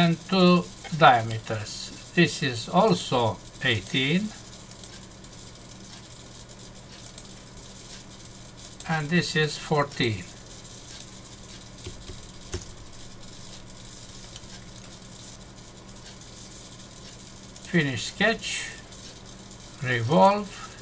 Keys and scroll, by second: 12.5 Return, 14.3 Num_Lock.